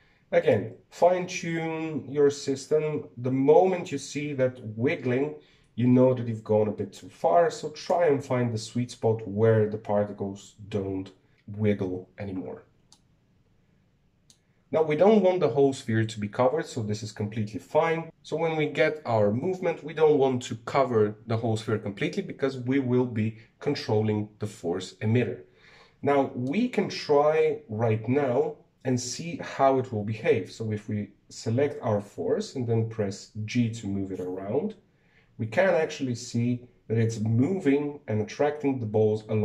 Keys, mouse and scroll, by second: 1.3-4.3 drag, 13.7-16.7 middle drag, 27.2-30.3 shift+middle drag, 30.7 g.